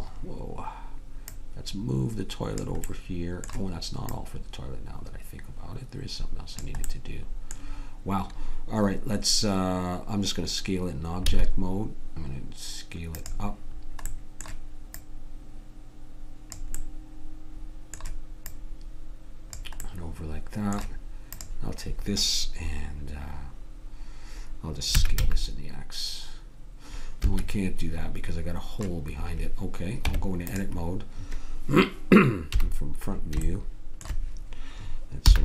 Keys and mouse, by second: 11.3 s, 14.9-16.8 middle drag, 18.5-19.5 middle drag, 19.5-23.2 drag, 24.9 s, 30.1 Tab, 32.5 KP_1, 33.6-35.3 drag, 35.3 b.